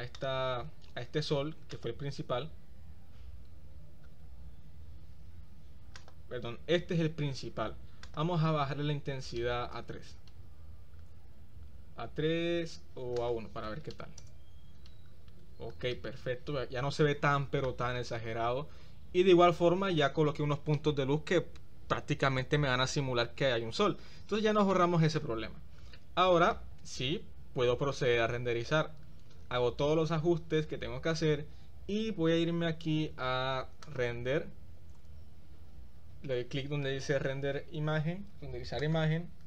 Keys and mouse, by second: 0.2 click, 1.8 click, 6.1 click, 8.2-10.2 drag, 13.3-14.4 drag, 16.1-17.7 middle drag, 24.9 middle click, 26.1 middle click, 34.0-39.3 drag.